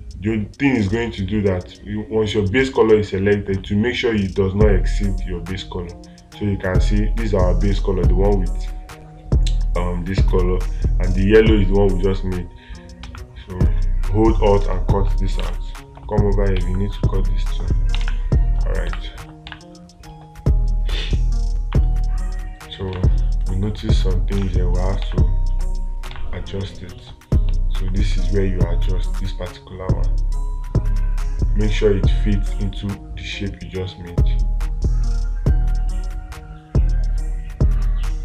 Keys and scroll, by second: 18.4 space, 19.9 space, 23.4 space, 26.6 space.